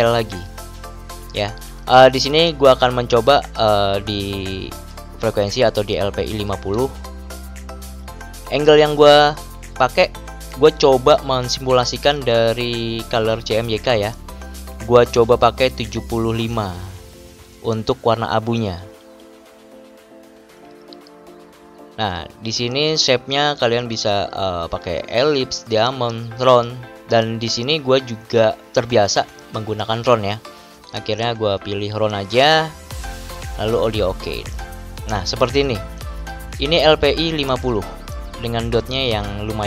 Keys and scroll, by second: 6.3-7.3 typing, 15.7-16.1 typing, 35.9 ctrl+=, 39.0 ctrl+-.